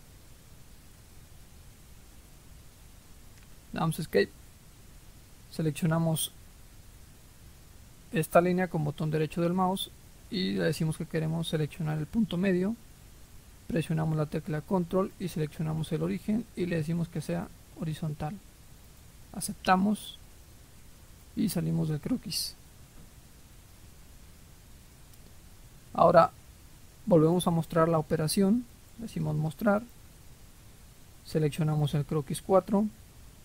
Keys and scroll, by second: 0.0-0.6 typing, 0.8 Return, 2.8 Escape.